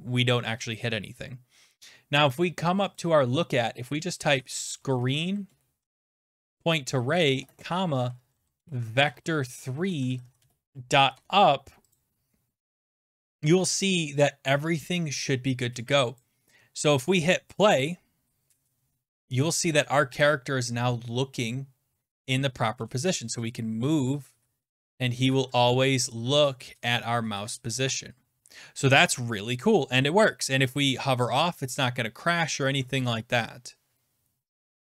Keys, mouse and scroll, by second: 3.0-8.1 drag, 4.1-12.0 typing, 6.3 Tab, 10.7 click, 12.0 click, 14.3-16.2 scroll down 6, 14.3 typing, 16.2 click, 17.6 click, 23.1-24.1 Left, 24.4 Right, 25.2 Up, 25.6 Up, 25.6 Down, 25.7-26.8 Left, 26.9 Right, 27.5 Right, 27.5-28.1 Right, 28.4 Left.